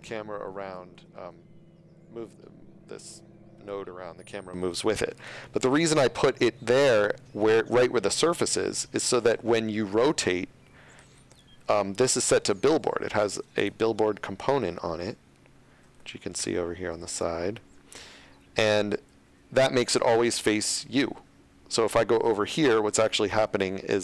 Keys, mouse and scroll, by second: 0.5 shift+Tab, 0.9 g, 5.2 right click, 8.5 middle click, 13.6 click, 16.2 ctrl+middle click, 20.7 middle click, 23.4 r, 23.9 z.